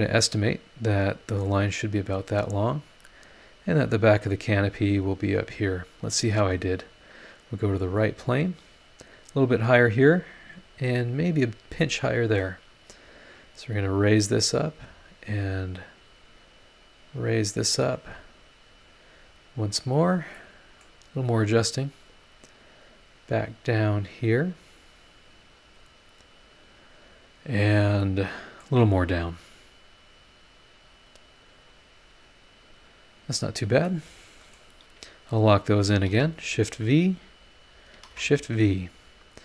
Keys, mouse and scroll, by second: 1.5 scroll down 1, 2.0-2.4 scroll up 1, 3.6-5.2 drag, 7.0 click, 7.7 scroll down 1, 8.4 scroll up 1, 9.3 scroll down 1, 9.8-10.5 scroll up 2, 11.5 scroll down 1, 11.8 middle click, 11.8 scroll up 2, 11.9 right click, 13.3 click, 14.1 scroll down 2, 16.1-17.4 drag, 17.4-19.1 middle drag, 19.1 click, 20.3 middle click, 20.4 click, 20.4 right click, 21.1 scroll up 1, 22.0 click, 22.7-24.4 drag, 24.4 scroll down 1, 26.0 click, 26.6 scroll down 1, 28.0 middle click, 28.2 click, 28.2 right click, 29.0 scroll up 1, 30.0-31.2 drag, 31.7 click, 33.4 scroll down 2, 33.8 middle click, 33.9 click, 33.9 right click, 35.7 shift+click, 36.1 shift+v, 36.8 click, 37.7 shift+click, 38.0 shift+v, 38.8 click.